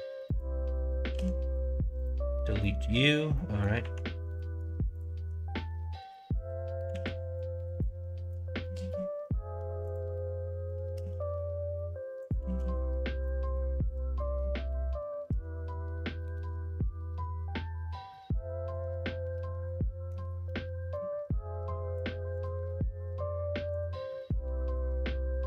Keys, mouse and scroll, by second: 0.3 click, 1.1 x, 2.5 middle click, 3.3 middle click, 3.8 1, 6.8 ctrl+r, 8.7 ctrl+z, 9.8 click, 10.9 g, 12.4 ctrl+z, 13.2 middle click, 14.1 middle click, 15.2 alt+h, 16.2-20.0 middle drag, 20.9-21.9 middle drag, 23.7 click, 24.2 3.